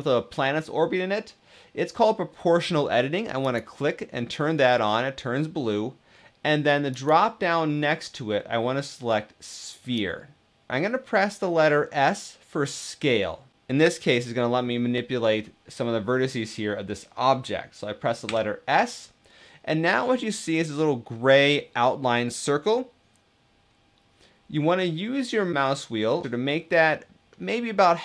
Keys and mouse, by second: 3.2 click, 6.7-10.7 drag, 18.0 s.